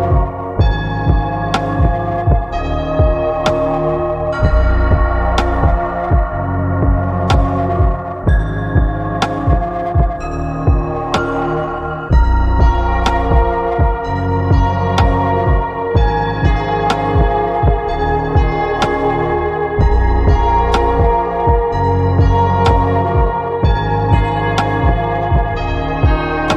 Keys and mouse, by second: 1.8-3.8 drag, 5.2 s, 7.3 click, 10.3 middle click, 13.9 click, 15.9-17.0 middle drag, 18.3 shift+middle click, 19.6-20.6 middle drag, 20.7 shift+middle click, 22.4-23.7 shift+middle drag, 24.7 click, 26.4-26.5 middle drag.